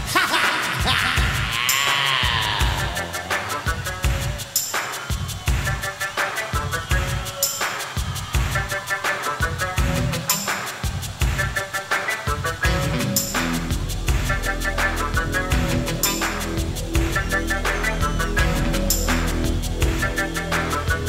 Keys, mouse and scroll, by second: 4.1 s, 7.0 g, 13.1 s, 18.8 s.